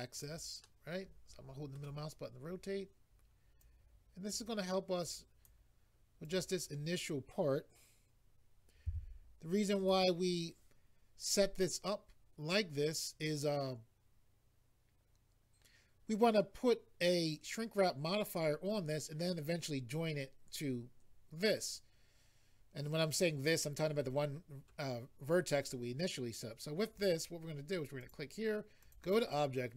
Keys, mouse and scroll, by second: 0.1 click, 0.6 middle click, 3.6 click, 5.0 click, 6.2 click, 9.8 click, 28.0 click, 28.8 click.